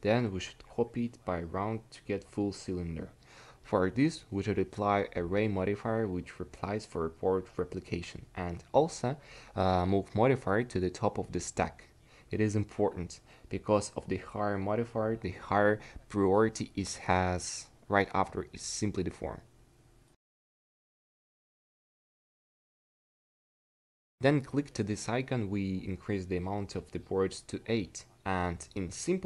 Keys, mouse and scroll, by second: 0.9-10.8 drag, 13.6-19.2 drag, 20.0-29.2 drag.